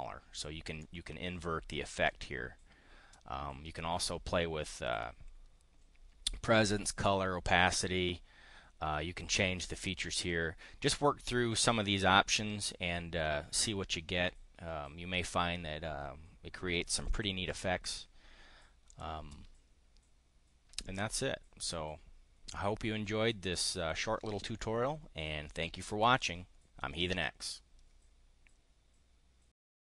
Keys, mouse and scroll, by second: 0.7-2.2 drag, 18.8 click, 20.8 click, 21.4-21.7 drag, 22.0-23.3 drag, 23.4 click, 29.7 click.